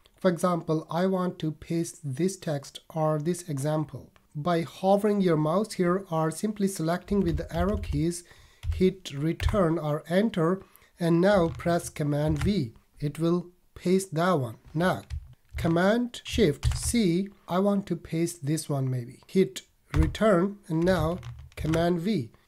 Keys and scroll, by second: 7.1 Down, 7.5 Up, 8.6 Down, 12.2 super+v, 16.6 shift+super+c, 21.5 super+v.